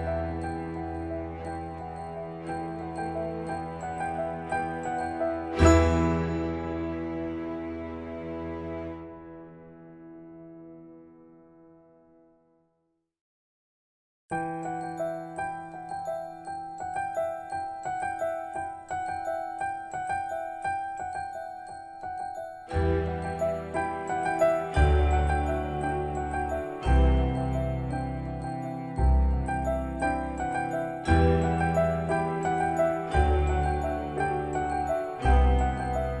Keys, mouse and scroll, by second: 7.6 Return, 9.0 scroll up 1, 10.2 click, 11.9 space, 13.6 click, 17.7 scroll up 1, 31.9 click.